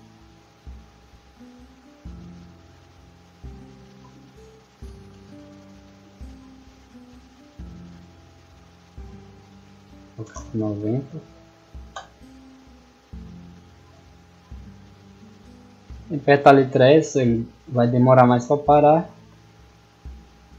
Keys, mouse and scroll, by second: 3.0 d, 4.2-5.7 typing, 12.5 w, 13.8 a, 14.7 s, 16.4 d, 18.5-20.3 typing.